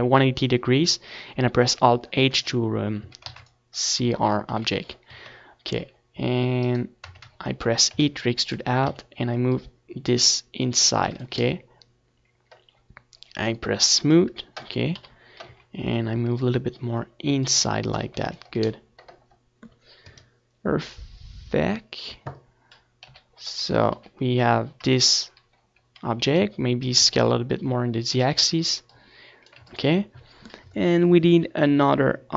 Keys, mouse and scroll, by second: 0.1 a, 0.4 ctrl+s, 1.6 KP_7, 2.1 z, 4.0 Tab, 4.9 e, 5.4-8.0 drag, 5.8 Tab, 7.8 ctrl+s, 8.1 z, 10.7-12.3 drag, 11.8 KP_7, 12.2 z, 13.1-14.9 drag, 14.3-17.8 middle drag, 14.6 z, 14.9 ctrl+s, 19.5 KP_1, 20.3 ctrl+KP_1, 21.2 ctrl+KP_3, 22.0-23.3 middle drag, 22.6 s, 23.3-24.3 right drag, 23.4 s, 24.3-26.8 drag, 24.5 right click, 25.9 ctrl+s, 31.5-32.3 middle drag, 32.0 Tab.